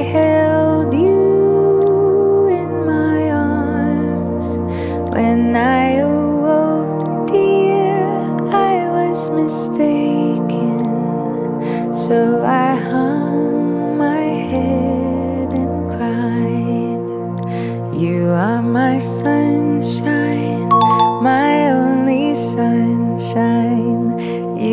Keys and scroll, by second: 2.6 Escape, 9.3 Delete, 12.3 Return.